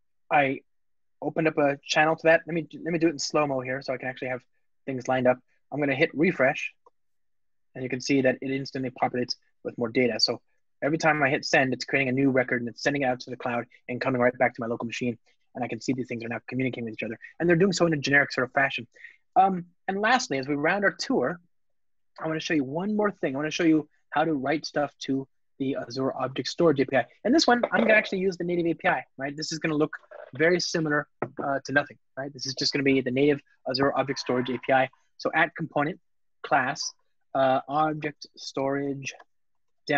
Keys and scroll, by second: 35.9 Return.